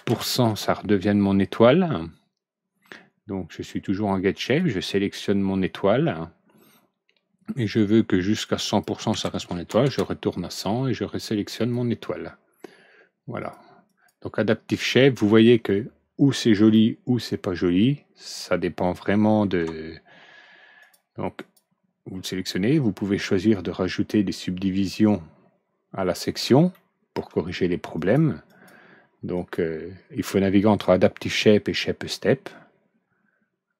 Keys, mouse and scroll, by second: 0.0 KP_5, 0.4 KP_Enter, 4.4 click, 8.4 click, 9.0 KP_1, 9.3 KP_0, 9.8 KP_Enter, 11.5 click, 13.3 click, 13.8 click, 16.5 alt+Right, 16.7-19.3 middle drag, 20.7 click, 21.3 click, 23.5-26.1 drag, 26.7-27.1 middle drag, 26.9 alt+Right, 27.9 click, 28.4 click, 29.3 click, 30.5 click, 31.7-33.7 drag.